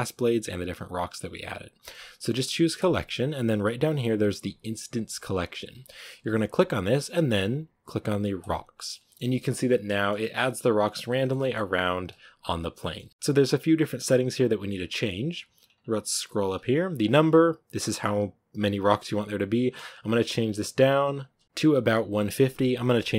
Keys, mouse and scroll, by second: 8.4 click, 8.8-9.5 middle drag, 9.5 a, 9.7-10.3 middle drag, 10.3-11.0 scroll up 2, 11.0-11.5 shift+middle drag, 11.5-12.7 scroll up 1, 12.7-16.9 middle drag, 16.9 click, 18.7-21.1 middle drag, 21.1 click, 21.4-23.1 middle drag.